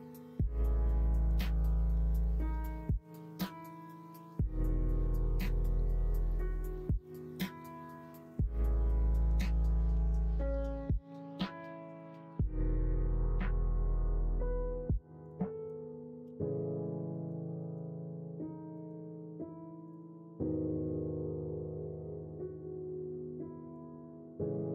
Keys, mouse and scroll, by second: 1.6-2.6 middle drag, 3.0 ctrl+b, 8.4 middle click, 11.0 3, 12.9 middle click, 16.2 x, 17.1 middle click, 17.6 middle click, 18.7 middle click.